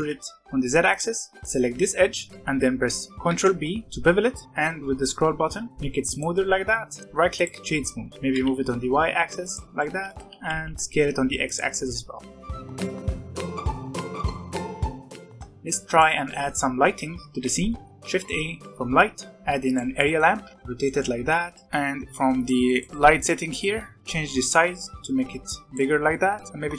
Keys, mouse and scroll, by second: 1.3 click, 3.2 ctrl+b, 6.5 Tab, 6.9-8.1 right drag, 8.1 g, 9.6 scroll down 2, 9.7 middle click, 10.2 s, 12.0-12.5 scroll up 2, 12.2 shift+middle drag, 12.5 middle click, 12.7-14.6 typing, 12.8 middle drag, 12.9 alt+a, 13.5 shift+middle click, 13.7 scroll up 2, 14.5 middle click, 14.7 middle click, 14.8 Tab, 14.9 middle click, 15.1 middle click, 15.8 shift+right click, 16.2 middle click, 16.9 z, 17.6 middle click, 17.9 shift+a, 19.9-20.3 middle drag, 20.3 g, 20.5-21.5 middle drag, 21.5 s, 21.6 middle click, 22.3 click, 24.0-26.0 drag, 26.0 middle click, 26.5-26.7 drag.